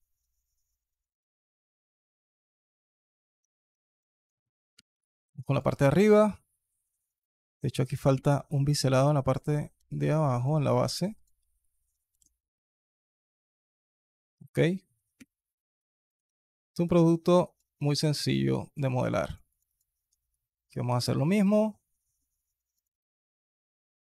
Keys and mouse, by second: 3.2 Tab, 3.6 alt+click, 4.6 /, 5.3 click, 6.9 drag, 8.6 Tab, 9.0 alt+click, 9.6 KP_2, 11.9 ctrl+b, 13.8 click, 14.2 alt+click, 15.0 /, 16.1 Tab, 16.7 Tab, 17.6 alt+click, 18.8 KP_2, 20.7 ctrl+b, 22.7 click, 23.1 alt+click, 23.6 Tab, 23.9 click.